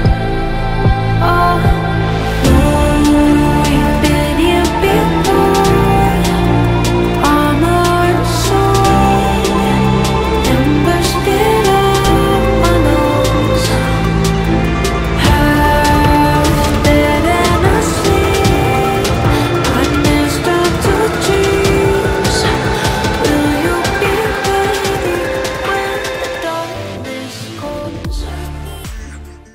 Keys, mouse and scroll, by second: 0.6 shift+click, 3.5 shift+click, 5.7 shift+click, 27.4 alt+scroll down 1, 27.8 alt+scroll up 1.